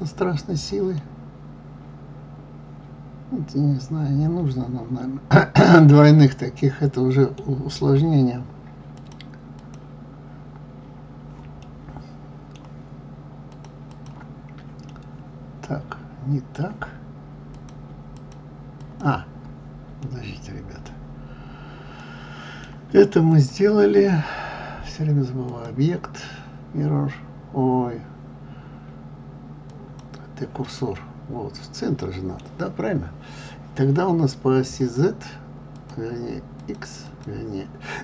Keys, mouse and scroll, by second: 1.0-4.0 middle drag, 9.0 click, 9.6 click, 11.6-13.5 middle drag, 13.5 click, 13.9 click, 14.9-17.5 middle drag, 17.5 click, 18.2 click, 18.8 click, 20.0-23.3 middle drag, 23.3 click, 25.4-28.5 drag, 30.8-33.8 middle drag, 34.8 click, 35.7 click, 36.6 click, 37.0 click.